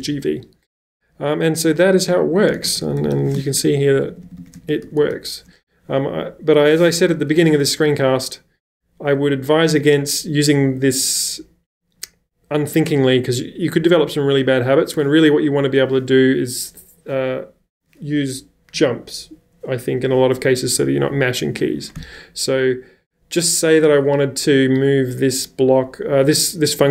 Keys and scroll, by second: 2.3-5.6 typing, 7.2 u, 7.3 u.